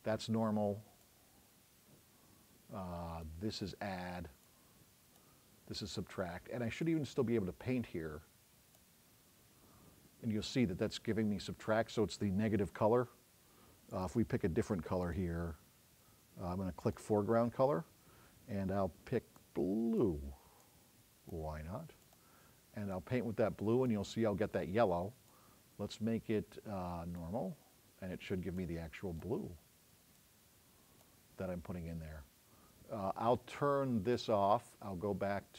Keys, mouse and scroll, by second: 14.0 click, 15.1 click, 30.3 click.